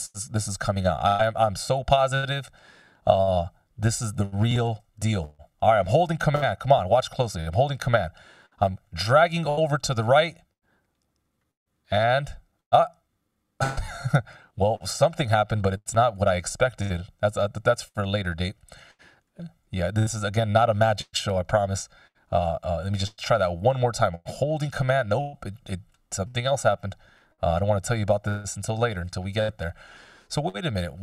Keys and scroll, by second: 6.9 Delete, 19.3 c.